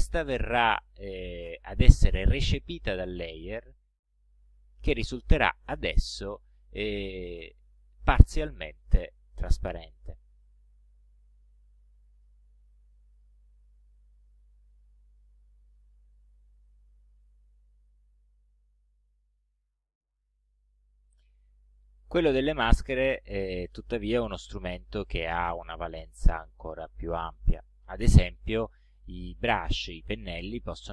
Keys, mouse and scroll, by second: 4.5 click, 5.7 ctrl+scroll up 2, 6.5 ctrl+click, 10.7-11.3 ctrl+scroll down 2, 11.9 ctrl+click, 13.2 click, 14.4 click, 16.3-16.6 ctrl+scroll up 2, 17.4 ctrl+scroll down 2, 18.0-18.4 ctrl+scroll down 2.